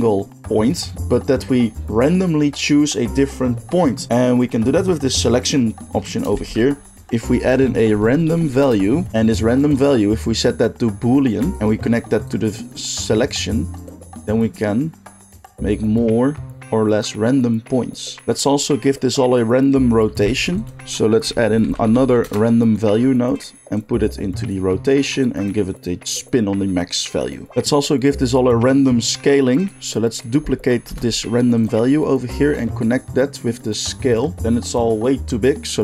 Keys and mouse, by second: 6.3 shift+a, 9.1-9.6 middle drag, 9.6-23.4 drag, 20.3 shift+a, 23.4 middle drag, 23.7-29.7 drag, 29.7 middle click, 29.9-31.6 drag, 30.8 shift+d, 31.6-32.8 middle drag, 32.8-35.8 drag.